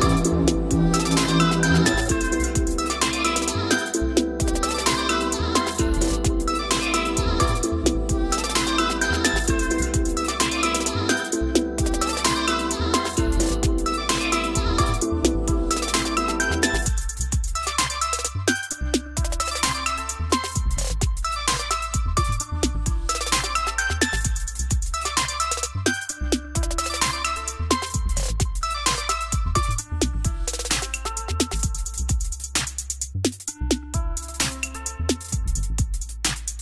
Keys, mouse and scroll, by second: 3.6 click, 4.6 Right, 7.0 click, 7.4 middle click, 7.5 middle click, 7.6 middle click, 7.9 middle click, 8.1 middle click, 9.0 F3, 11.1 click, 11.5 middle click, 11.6 middle click, 12.0 middle click, 12.8 click, 13.0 middle click, 13.0 middle click, 13.1 middle click, 13.1 middle click, 18.0 click, 18.2 click, 19.0 p, 21.5-23.5 typing, 21.6 click, 24.5 click, 26.5 o, 27.2-28.9 drag, 28.9 middle click, 29.0 middle click, 29.3 middle click, 29.4 middle click, 30.6 click, 30.8 click, 31.2 middle click, 31.2 middle click, 31.3 middle click, 31.6 Escape, 32.3 click, 33.3 F3, 36.3 F3.